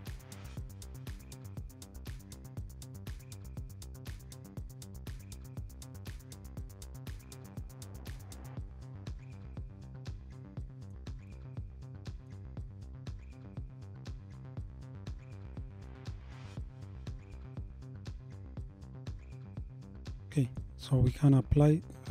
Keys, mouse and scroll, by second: 9.4-12.5 middle drag, 12.5-12.9 scroll up 3, 17.5-19.5 middle drag, 19.5-20.0 scroll down 3, 20.0-21.1 middle drag, 21.1 click.